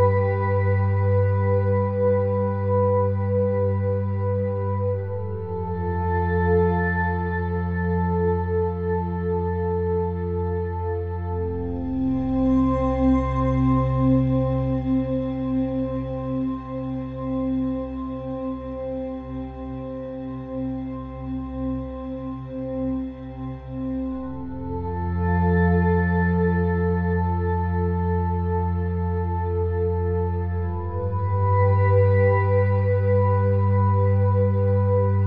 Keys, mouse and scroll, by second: 0.1 click, 0.3 Tab, 1.7-3.6 drag, 2.9 shift+d, 4.6 ctrl+z, 4.9 ctrl+z, 5.3 click, 5.7 shift+d, 6.2 click, 6.6 p, 7.0 Tab, 7.2 click, 7.3 Tab, 7.7 middle click, 7.8 ctrl+r, 8.9 ctrl+z, 9.1 ctrl+r, 9.7 click, 11.0-12.6 drag, 12.3 x, 13.4 click, 14.2 click, 14.6 x, 15.1 click, 15.6 middle click, 16.1 middle click, 16.8 Tab, 17.9 ctrl+alt+click, 18.8 ctrl+z, 18.9 ctrl+z, 19.4 Tab, 19.8 Tab, 20.7 ctrl+alt+click, 21.7 Tab, 22.0 middle click, 22.5 ctrl+r, 23.4 middle click, 24.4-26.4 drag, 26.3 s, 27.5 middle click, 28.4 ctrl+z, 29.8 middle click, 33.6 k, 34.4 right click, 34.6 k.